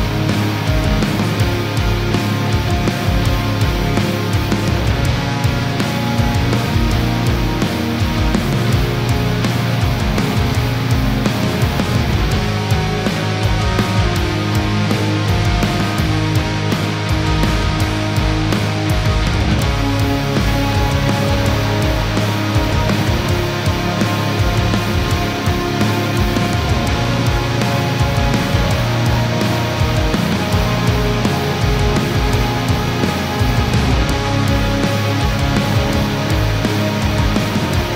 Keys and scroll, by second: 23.3 ctrl+j.